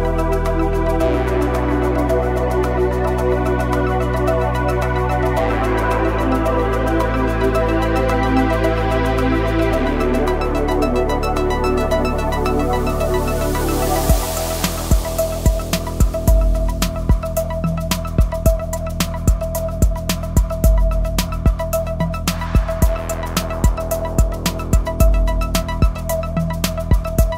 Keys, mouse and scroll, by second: 0.5-1.3 typing, 1.8 right click, 2.8 click, 5.3 Return, 5.8 scroll up 1, 6.4 click, 7.8 typing, 8.1 click, 9.1 scroll down 1, 9.4 space, 9.6 click, 9.8 space, 10.2 click, 11.9 scroll down 1, 12.4 scroll up 1, 14.1 typing, 15.5 click, 18.1 click, 21.1 click, 22.9 scroll down 1, 24.0 typing, 24.7-27.0 drag.